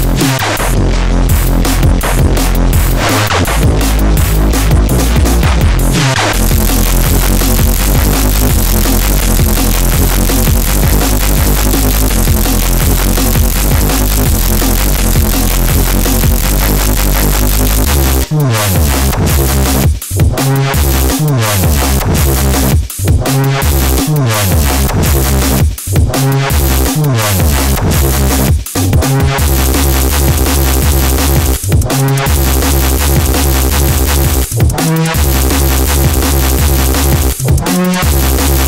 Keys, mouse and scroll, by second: 0.1-4.9 drag, 7.7 click, 10.3 click, 12.0 click.